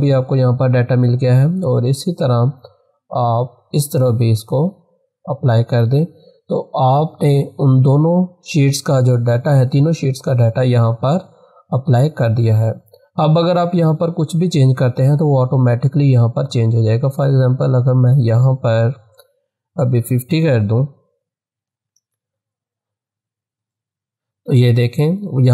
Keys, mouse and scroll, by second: 2.5-6.7 drag, 10.0 click, 19.9-20.6 typing, 21.8 click.